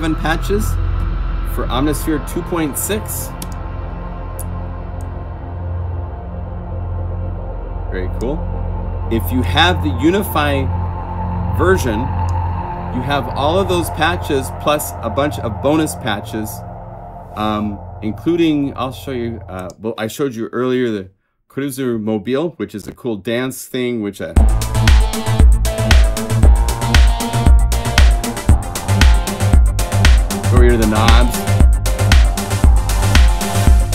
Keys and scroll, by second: 28.5 F1, 28.5 F4.